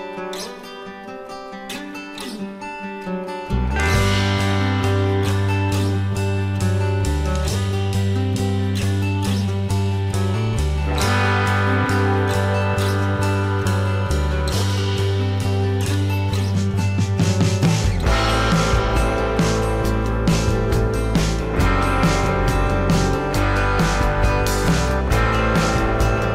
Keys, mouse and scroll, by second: 1.4 shift+click, 2.2 alt+scroll down 1, 2.5 space, 3.4 ctrl+shift+a, 5.1 alt+scroll up 1, 5.3 space, 10.8 v, 11.4 shift+click, 13.7 space, 16.3 alt+click, 25.7 space.